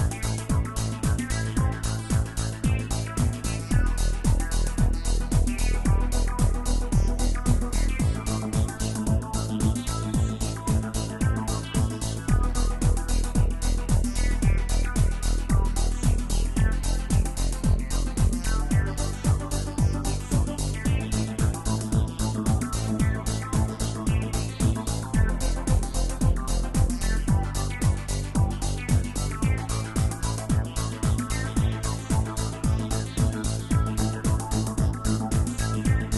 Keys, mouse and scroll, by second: 1.1-3.5 drag, 3.5 KP_0, 6.4-7.2 middle drag, 7.2 space, 12.0-13.5 middle drag, 13.5 space, 14.1-15.3 right drag, 15.3-18.1 middle drag, 18.1 click, 22.4-22.9 drag, 24.0-26.5 scroll up 5, 26.5-32.1 drag, 32.1-34.0 middle drag, 34.0-36.0 drag, 36.0-36.1 scroll down 1.